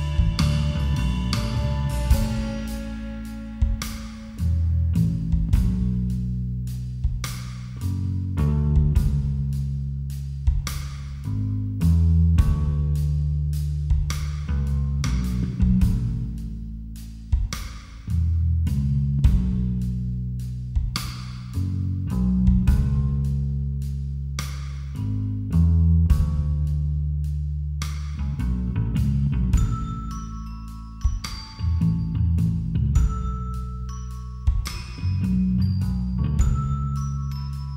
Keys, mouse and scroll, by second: 0.0-1.7 drag, 4.3-7.4 drag, 9.9-11.2 drag, 11.2 a, 14.4-16.1 middle drag, 16.1-18.3 drag, 18.3-23.6 middle drag, 18.3 s, 34.2 click, 34.4-35.7 drag.